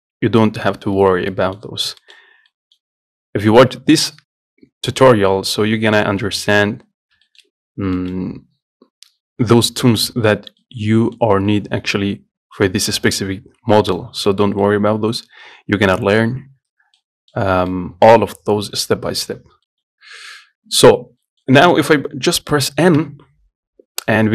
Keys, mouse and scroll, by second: 2.0-2.3 scroll up 1, 2.3 shift+middle click, 2.5 scroll down 1, 2.7-5.7 middle drag, 5.7-6.0 scroll down 2, 6.0-7.2 scroll up 2, 7.2-7.5 scroll down 2, 7.5 shift+middle click, 7.9-8.2 scroll up 2, 8.2-10.6 shift+middle drag, 10.6-10.9 scroll down 1, 10.9 middle click, 11.8-12.2 scroll up 1, 12.2-14.0 scroll down 1, 14.0 middle click, 14.3-14.6 scroll up 2, 14.6-17.6 shift+middle drag, 17.6-18.0 scroll up 2, 18.0-20.2 middle drag, 20.2-21.5 scroll down 1, 21.5-23.2 middle drag, 23.2 n.